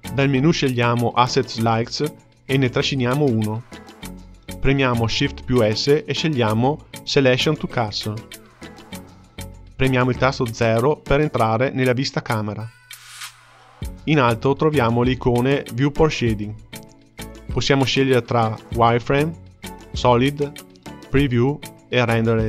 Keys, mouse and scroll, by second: 3.8-4.9 drag, 6.6 shift+s, 11.1 KP_0, 18.8 click, 20.2 click, 21.1 click.